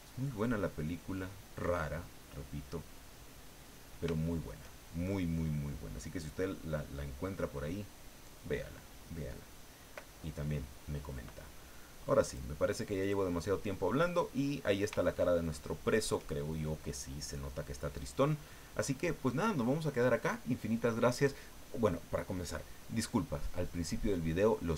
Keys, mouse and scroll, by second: 0.8-1.8 ctrl+drag, 1.9 ctrl+middle click, 2.8-3.8 middle drag, 4.1 shift+middle click, 12.2 click, 13.0 click, 14.1 scroll down 2, 15.1-16.1 shift+middle drag.